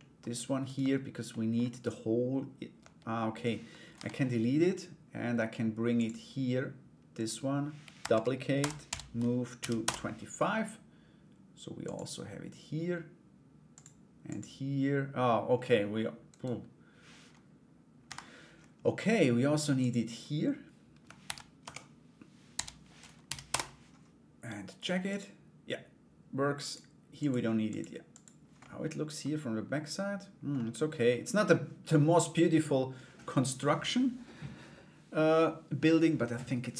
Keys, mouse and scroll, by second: 0.2 right click, 0.9 Tab, 0.9 middle click, 1.3 right click, 3.5 Delete, 5.6 click, 6.8 right click, 7.6 shift+d, 8.4 m, 11.4 click, 13.3 click, 13.8 click, 15.9 right click, 17.6 Delete, 19.4 click, 20.8 ctrl+d, 21.2 Return, 22.1 m, 24.6 click, 26.2 click, 26.7 click, 27.2 click, 27.7 click, 28.2 middle click, 30.1 middle click, 33.0 click.